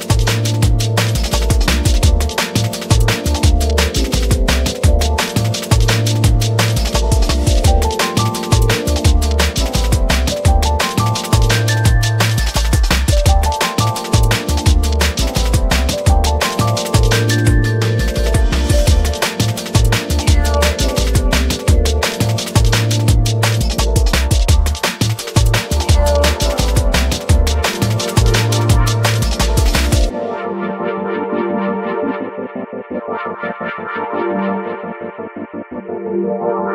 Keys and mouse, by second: 1.5-2.8 drag, 5.1 click, 5.4 space, 8.4-12.9 shift+drag, 14.7 click, 15.9 space, 16.8 drag, 18.2 click, 18.6 Tab, 19.7 1, 20.8 a, 21.1 a, 21.3 3, 21.8 alt+shift+click, 23.3 ctrl+KP_Add, 23.5 ctrl+KP_Add, 27.4 ctrl+g, 29.1 ctrl+z, 29.3 ctrl+z, 29.6 ctrl+z, 30.4 ctrl+g, 32.0 Tab, 33.3-36.7 drag, 35.9 l.